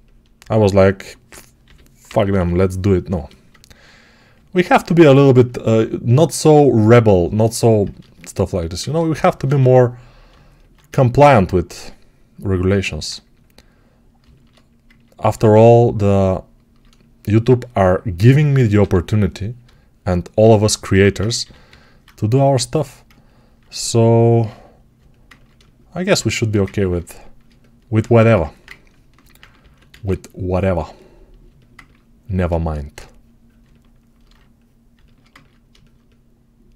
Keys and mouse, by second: 1.5 g, 1.9 ], 2.1 ], 9.3 1, 18.7 2, 21.3 g, 24.0-27.3 alt+right drag, 27.9 1, 29.4 ctrl+z, 33.5-36.7 alt+shift+right drag.